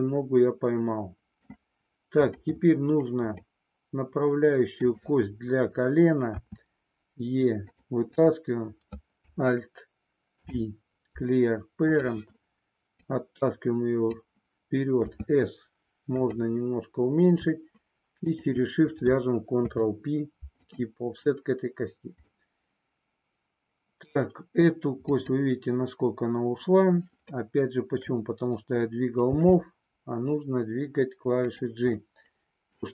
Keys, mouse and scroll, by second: 2.2 click, 3.4-4.8 middle drag, 6.4 e, 7.7 click, 10.3 alt+p, 13.1-14.2 drag, 15.1 s, 19.5 ctrl+p, 22.3-24.1 middle drag, 25.1 click, 27.3 middle click, 29.3 g, 31.4 click, 32.2 middle click.